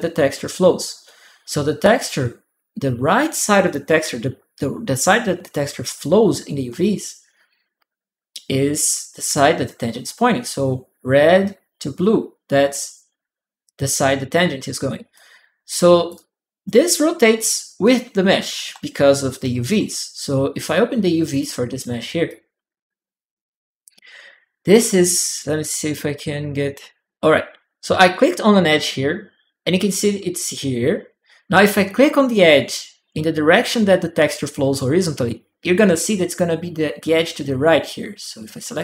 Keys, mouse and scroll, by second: 14.9 click, 15.9 click, 16.5 right click, 16.7 click, 16.7 right click, 16.8 click, 16.9 right click, 18.4-20.0 typing, 18.8 click, 18.8 right click, 19.0 click, 19.0 right click, 21.1 click, 22.1 click, 25.2 click, 26.7 click, 38.6 click.